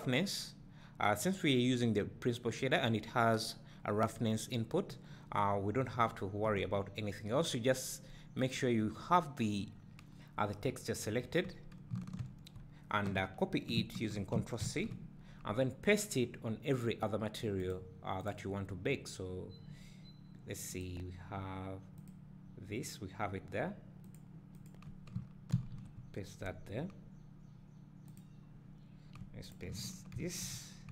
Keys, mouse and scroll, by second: 8.4-9.0 drag, 20.9 click, 22.0 click, 25.6 ctrl+v, 28.3 click, 30.2 ctrl+v.